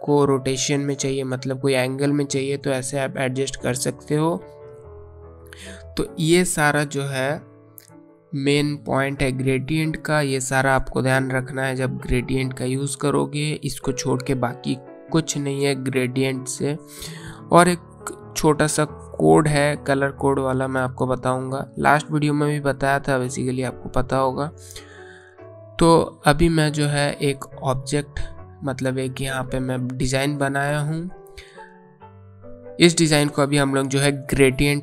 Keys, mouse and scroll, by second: 4.6 scroll up 1, 4.6-6.4 scroll down 1, 6.4 space, 6.6 click, 7.0 space, 25.0-27.1 scroll down 1, 27.7 click.